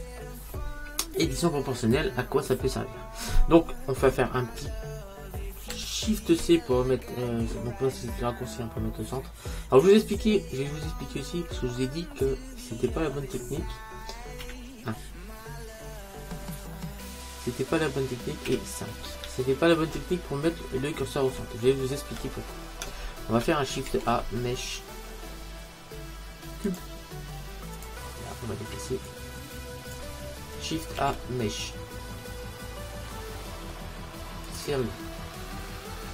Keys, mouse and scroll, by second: 1.7-5.8 middle drag, 5.8 shift+c, 6.9-8.4 middle drag, 11.8-14.5 middle drag, 14.5 KP_1, 15.9-17.0 middle drag, 18.6 KP_5, 21.1-24.9 middle drag, 24.0 shift+a, 29.2 click, 31.1 shift+a.